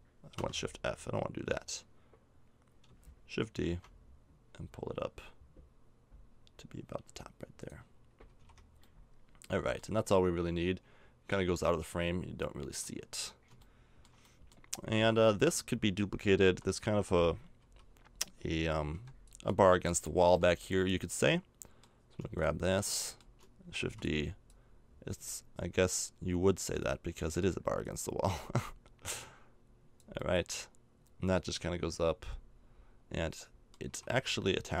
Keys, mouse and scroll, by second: 3.6 shift+d, 7.9 middle click, 8.2 a, 8.4 Tab, 14.9 Tab, 16.4 l, 17.6 a, 18.9 b, 19.8 middle click, 20.2 b, 23.8 shift+d, 27.4-29.9 middle drag, 30.6 middle click, 32.5 middle click, 33.8 a, 34.0 Tab, 34.3-34.8 right drag.